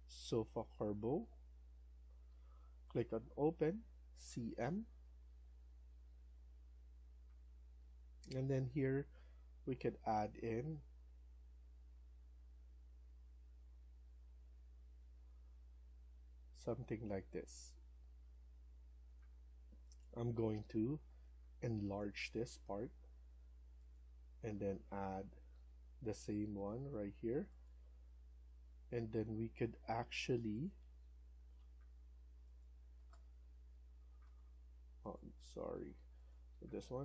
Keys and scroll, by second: 4.1-4.5 typing, 20.0 Escape, 20.5 Escape, 24.2-25.1 typing, 28.0 Escape, 28.3 Escape, 28.5 Escape, 31.4 Delete, 32.8 s, 34.1 Escape.